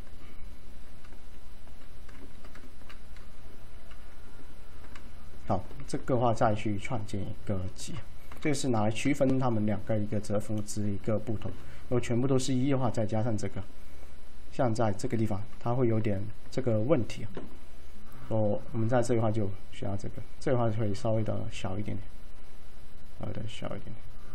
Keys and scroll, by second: 8.4 F3.